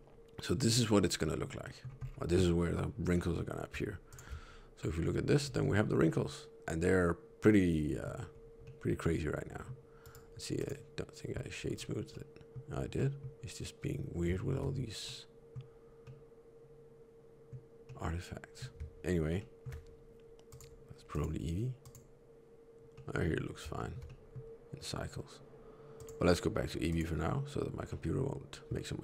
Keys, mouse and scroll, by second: 1.5 middle click, 1.9 scroll down 1, 3.0 middle click, 3.0 scroll down 3, 4.0 ctrl+shift+click, 5.3 middle click, 8.2 scroll up 2, 8.5 middle click, 9.9 right click, 11.5-12.0 scroll down 1, 12.0 middle click, 12.6 right click, 12.6 middle click, 12.6 scroll down 1, 12.9 middle click, 13.0 middle click, 14.2 shift+middle click, 14.9 middle click, 15.9 middle click, 19.3 shift+middle click, 20.4 click, 21.0 click, 22.8 middle click, 23.7 shift+middle click, 23.9 middle click, 25.8 click, 27.7 middle click.